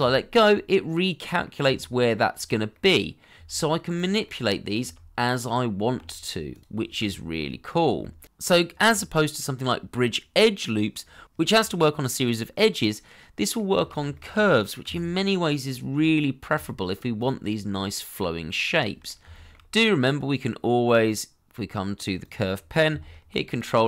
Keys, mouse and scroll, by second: 0.5 scroll down 1, 0.5 middle click, 1.6 g, 2.7 middle click, 3.3 g, 7.3 middle click, 8.0 shift+middle click, 8.9 g, 10.3 shift+middle click, 12.5 middle click, 14.1 shift+middle click, 14.8 g, 15.9 middle click, 16.5 g, 17.5 middle click, 19.3 shift+middle click, 23.4 ctrl+click.